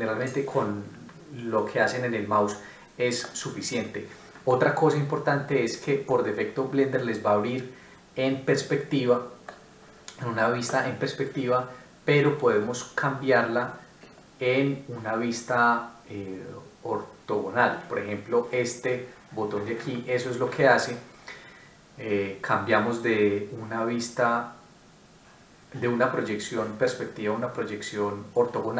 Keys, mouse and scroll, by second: 1.5 middle click, 6.1 middle click.